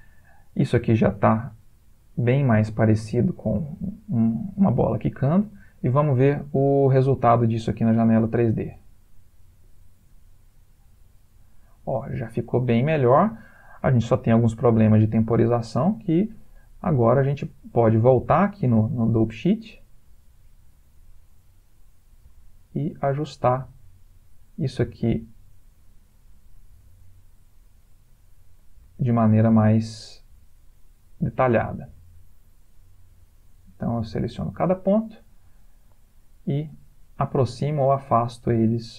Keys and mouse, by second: 5.4 ctrl+space, 7.6 click, 8.7 space, 12.5 space, 15.9 middle click, 16.5 ctrl+middle click, 17.0 middle click, 19.5 click, 22.1 click, 22.3 g, 23.4 click, 23.6 g, 25.0 click, 25.1 g, 26.6 click, 26.7 g, 28.6 click, 28.8 g, 30.2 click, 30.4 g, 31.7 click, 31.9 g, 32.8 click, 33.1 g, 37.0 middle click, 38.6 middle click.